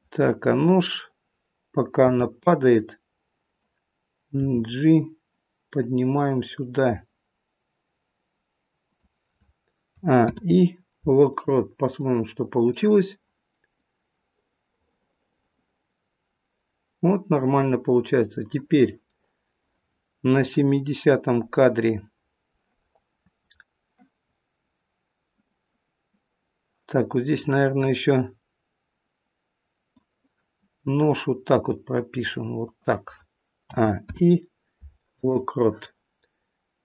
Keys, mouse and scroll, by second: 18.5 scroll down 1.